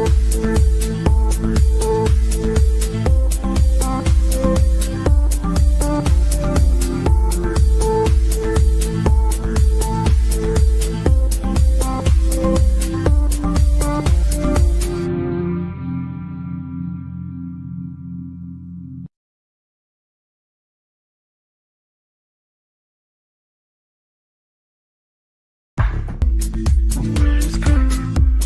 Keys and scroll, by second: 15.9 Escape, 17.5 Delete, 20.0 Delete.